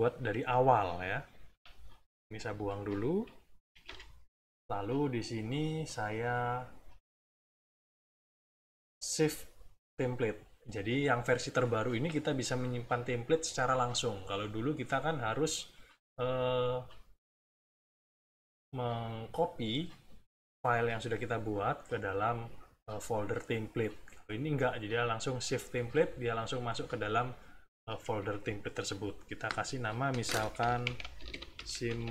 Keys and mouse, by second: 1.4 s, 2.2 click, 3.8 Delete, 4.9 middle click, 6.4 click, 25.7 click, 30.6-32.1 typing.